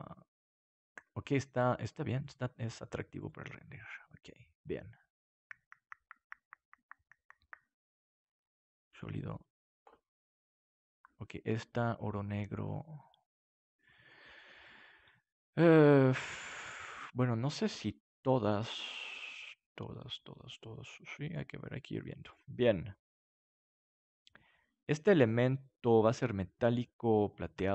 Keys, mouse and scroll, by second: 2.2-6.7 drag, 7.9-11.9 drag, 17.6-21.8 drag, 22.2-27.3 drag.